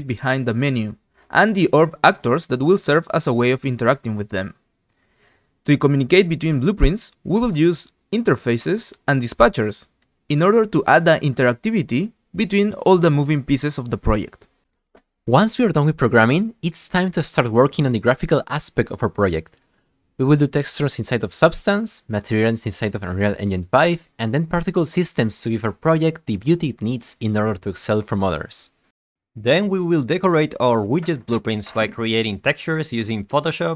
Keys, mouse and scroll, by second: 1.2 Tab, 1.4 click, 1.6 click, 1.9 =, 2.6 click, 3.0 click, 3.2 click, 3.4 click, 4.3 click, 4.7 alt+click, 5.0-5.9 typing, 6.0 click, 7.1 right click, 7.2 right click, 7.3 click, 7.7 right click, 7.9 right drag, 8.2 right click, 8.5 middle click, 8.6 click, 9.0 scroll up 2, 9.2 scroll down 2, 9.7 ctrl+click, 10.0 right click, 10.2 click, 10.4 right click, 10.9 click, 11.7 click, 12.0 click, 12.2 click, 12.3 click, 12.6 click, 12.7 click, 12.9 click, 13.0 click, 13.5 right click.